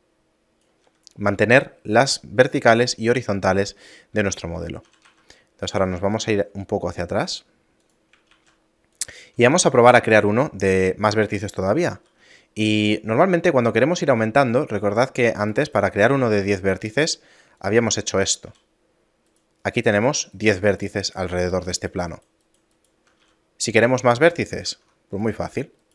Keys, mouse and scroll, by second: 0.7 d, 4.4 Tab, 4.9 a, 5.0 a, 5.7 g, 8.3 shift+a, 9.7 Tab, 11.9 ctrl+r, 16.2 ctrl+r, 18.5 a, 19.3 right click, 20.0 shift+right click, 23.2 a, 24.7 ctrl+Tab, 25.8 alt+right click.